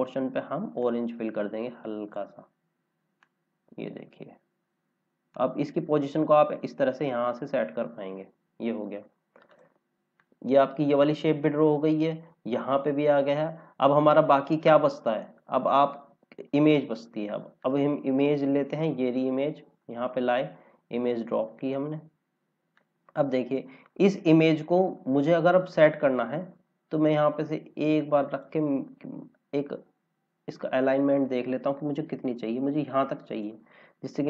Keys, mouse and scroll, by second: 7.8 scroll down 1, 9.4 click, 17.5 click, 22.1 scroll down 1, 22.7 click, 24.1-25.4 scroll up 1, 25.4 click, 29.2 scroll down 1, 30.5 click, 33.7 scroll up 1.